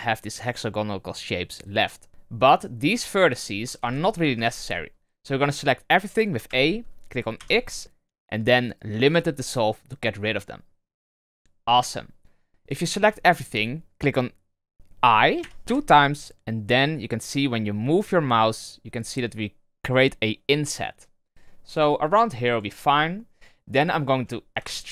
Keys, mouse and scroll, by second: 0.7 scroll up 1, 2.1 ctrl+z, 2.4 right click, 3.1 right click, 3.6 ctrl+z, 3.8 ctrl+z, 4.4 ctrl+z, 6.4 a, 7.3 x, 11.0 right click, 12.9 a, 15.4 i, 23.2-24.5 middle drag, 24.5 e.